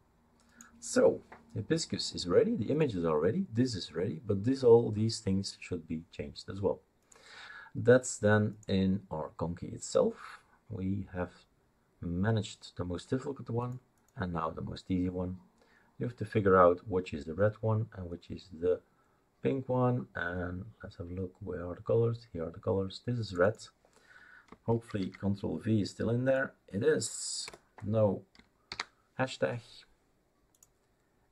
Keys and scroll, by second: 25.0 ctrl+v, 27.5 BackSpace, 28.7 ctrl+s.